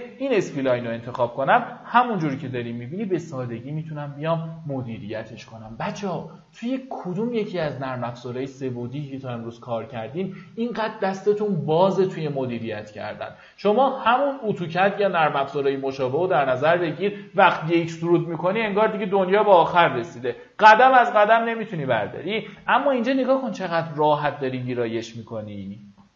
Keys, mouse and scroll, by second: 0.2-3.7 drag, 3.7 right click, 22.1 middle click, 23.5 click, 24.3 middle click, 25.0 typing.